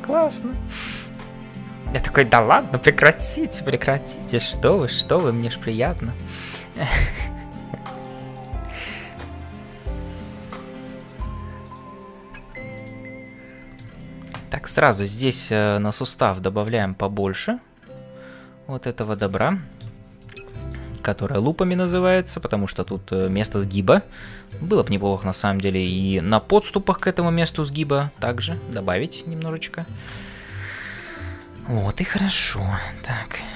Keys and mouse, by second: 0.0-33.5 typing, 0.8 click, 5.1 click, 6.4 click, 9.0 click, 11.7 click, 14.6 ctrl+r, 20.2 ctrl+r, 31.0 shift+middle click.